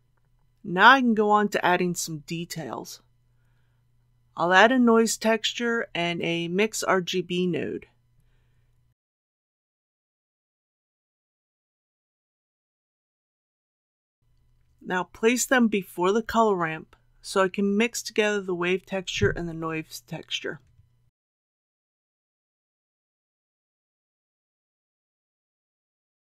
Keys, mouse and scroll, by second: 3.4 click, 5.4 shift+a, 8.4 click, 12.2 shift+a, 15.3-25.9 drag.